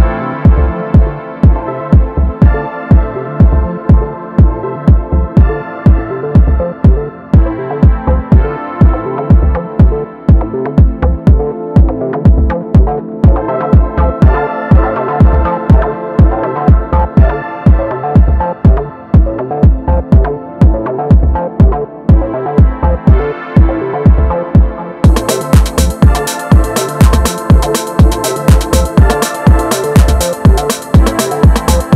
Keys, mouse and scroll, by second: 1.3 scroll up 2, 1.5 KP_1, 1.9 shift+scroll up 1, 2.0-5.1 shift+middle drag, 5.1-6.1 drag, 6.1-6.7 middle drag, 6.7 KP_1, 7.5-9.3 shift+middle drag, 9.3 Tab, 9.5-10.9 middle drag, 10.9 click, 11.6 ctrl+shift+click, 11.9-12.9 middle drag, 12.9 g, 15.9 click, 16.2 middle click, 17.1 ctrl+shift+click, 20.3 middle click, 21.2 scroll down 2, 21.4-23.6 middle drag, 23.6 click, 25.6-27.5 middle drag, 27.5 Tab, 27.8-30.8 middle drag.